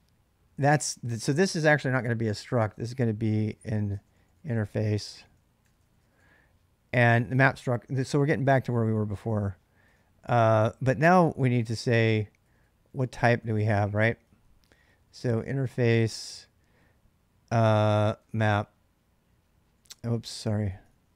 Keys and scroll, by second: 0.9 j, 2.5-6.5 typing, 8.8-9.7 typing, 11.3-16.5 typing, 17.9-21.1 typing.